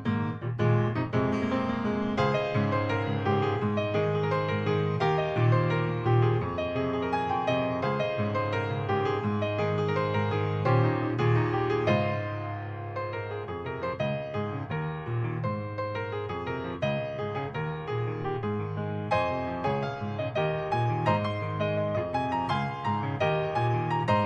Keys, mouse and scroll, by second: 3.4 click, 5.3 scroll up 1, 5.6 scroll down 2, 8.6 scroll up 1, 9.8 click, 15.5 click, 16.6 click, 20.4 click, 20.9 middle click, 21.4 scroll down 2, 21.7 middle click.